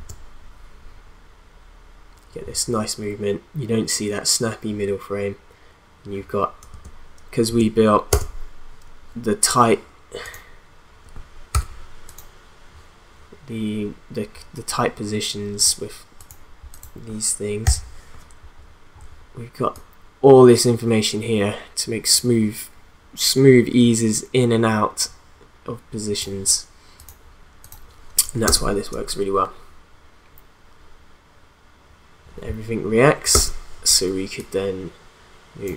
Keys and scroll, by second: 6.7 space, 6.8 v, 7.5 space, 11.5 v, 17.6 u, 28.5 space, 33.3 space.